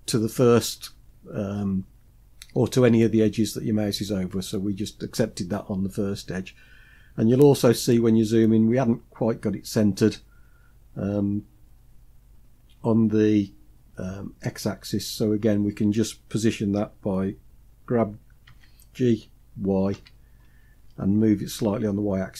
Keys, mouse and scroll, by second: 6.3-7.0 scroll up 2, 7.0 scroll up 1, 7.8 scroll down 1, 19.0 g.